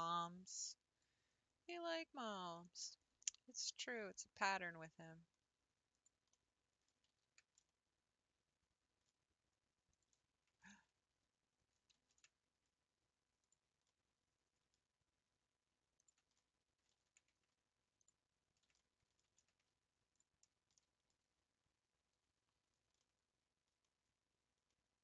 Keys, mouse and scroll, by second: 0.5 click, 2.6 click, 3.1-3.6 scroll down 5, 3.8 g, 6.3-7.3 middle drag, 7.3 ctrl+z, 7.7-9.9 middle drag, 9.9 ctrl+click, 10.7 ctrl+z, 12.1 ctrl+z, 13.4 click, 14.1-16.0 middle drag, 16.0 ctrl+click, 16.5 middle click, 17.1 ctrl+z, 18.0 ctrl+click, 18.8 middle click, 19.4 ctrl+z, 20.1 ctrl+click, 20.8-22.6 middle drag, 22.6 3, 23.3-25.0 middle drag.